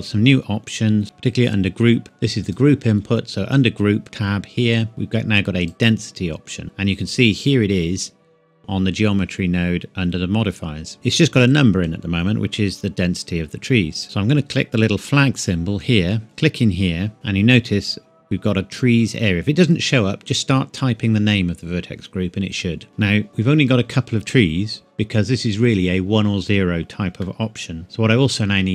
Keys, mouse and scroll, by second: 1.0 click, 2.4 click, 5.6 click, 11.8 click, 15.4 click, 22.5 click, 22.9-23.3 scroll down 1, 23.3 middle click, 27.2 middle click.